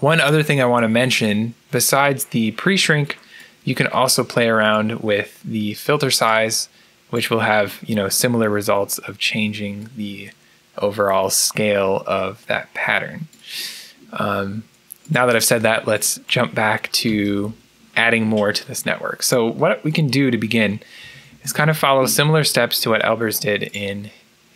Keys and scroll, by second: 20.8-22.1 typing.